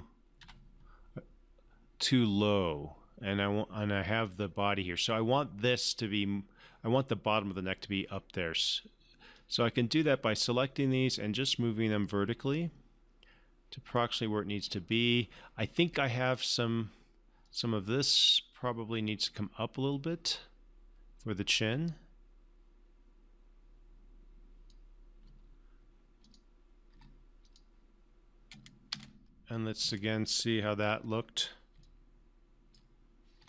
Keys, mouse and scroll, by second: 0.8 1, 9.7-10.6 drag, 11.8-15.5 drag, 20.7-22.2 drag, 27.3 3, 27.8 click, 29.4 space, 32.2-33.1 alt+drag.